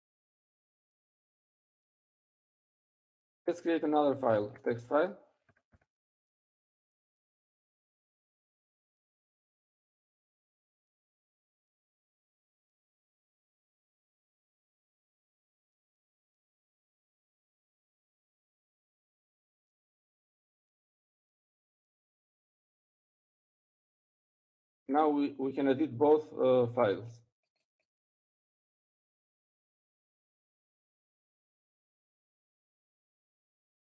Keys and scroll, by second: 6.6-15.9 typing, 23.1-24.0 typing, 26.6-28.0 typing, 31.6-32.4 typing.